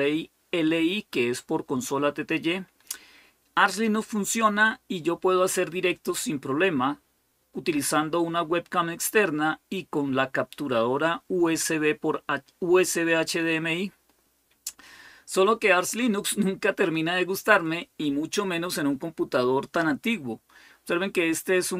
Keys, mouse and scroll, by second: 13.9-14.9 scroll down 2.